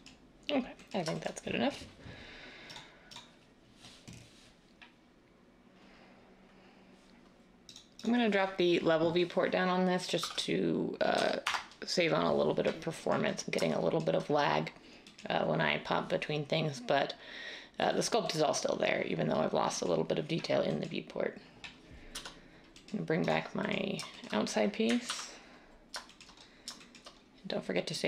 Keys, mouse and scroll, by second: 10.2-11.2 typing, 11.4 Return, 22.1 /, 25.0 ctrl+s.